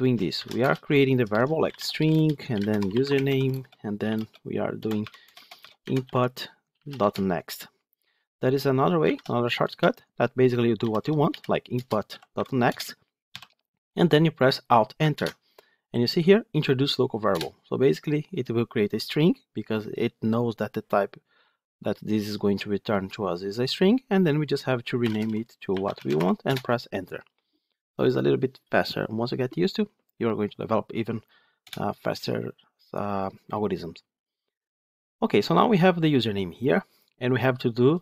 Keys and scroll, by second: 6.9 Return, 11.6 Return, 15.0 alt+Return.